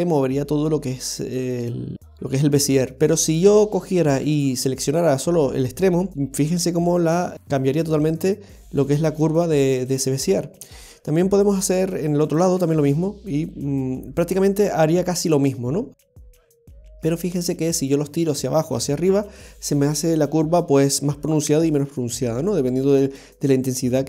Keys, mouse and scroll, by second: 4.4 right click, 5.9 g, 12.2 right click, 12.5 g.